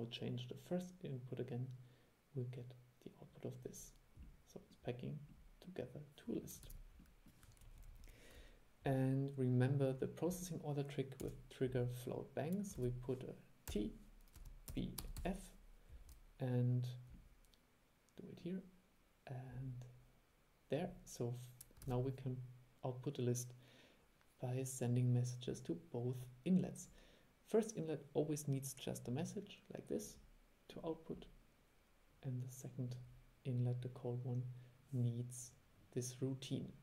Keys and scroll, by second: 6.8 super+e, 12.9 super+1, 22.0 super+e.